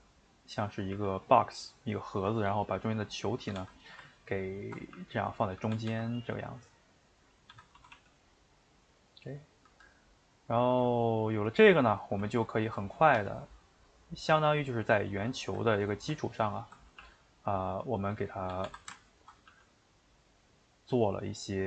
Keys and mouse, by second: 0.9 g, 1.5-3.4 middle drag, 3.4 a, 3.5 a, 3.7 middle click, 4.6 ctrl+Right, 4.9 g, 5.7 a, 5.9 a, 6.5 middle click, 7.5 a, 7.8 s, 9.2 middle click, 9.7 a, 10.1-12.6 middle drag, 12.6 right click, 13.1 g, 15.4 middle click, 15.6 ctrl+z, 16.5 ctrl+Right, 17.0 g, 18.5 a, 18.6 a, 19.2 ctrl+Right, 19.5 g, 21.0-21.6 middle drag.